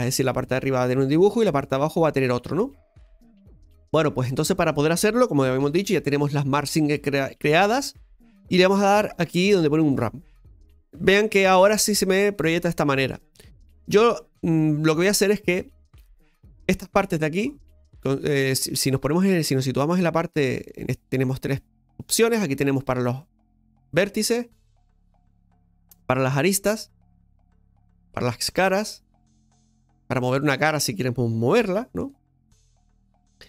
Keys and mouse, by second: 0.9 middle click, 2.0-3.1 middle drag, 16.1 right click, 17.0-18.0 drag, 23.2 right click, 23.9 right click, 25.2 click, 26.4 right click, 29.4 right click, 32.0 g.